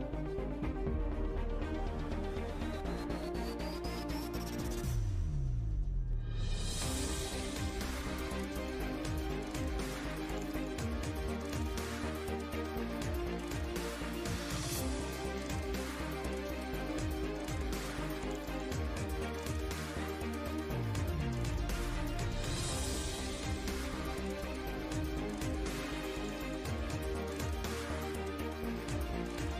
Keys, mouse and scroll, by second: 0.0 click, 0.3 middle click, 0.7 z, 0.9 z, 1.9 middle click, 2.7 right click, 3.3 r, 4.5 s, 6.4 s, 7.3 g, 8.3 right drag, 8.6 s, 9.7 r, 11.0-11.7 middle drag, 11.7 z, 11.9-12.4 drag, 12.1 z, 12.4 g, 14.2 drag, 14.6 a, 14.7 ctrl+s, 16.5 middle click, 19.7 right drag, 20.0 s, 21.3 shift+z, 22.1 middle click, 22.9 shift+z, 24.0 KP_0, 25.1 KP_0, 25.9 KP_0, 26.1 KP_Decimal, 27.1 middle click.